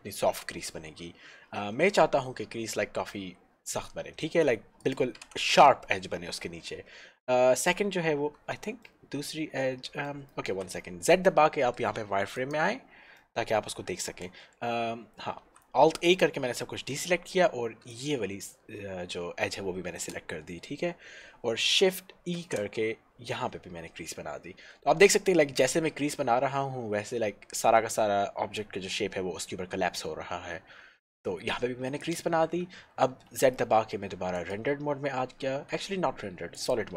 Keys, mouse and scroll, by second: 4.9 click, 5.7 Tab, 8.9 middle click, 10.5 alt+z, 12.3 click, 13.4 shift+middle click, 15.3 alt+middle click, 15.5 alt+a, 16.1 alt+middle click, 17.9 alt+shift+l, 22.5 shift+e, 32.1 click, 33.1 z, 34.5 click, 35.8 z, 36.6 click.